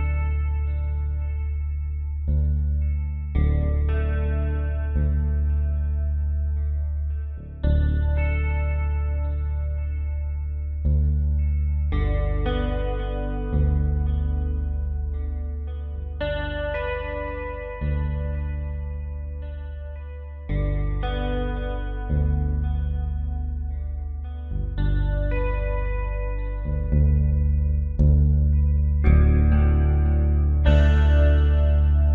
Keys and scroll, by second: 2.7 ctrl+g.